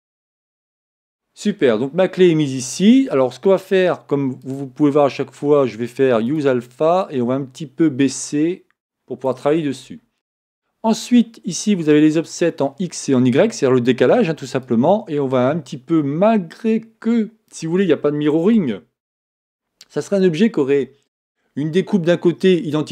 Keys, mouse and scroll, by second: 0.0 click.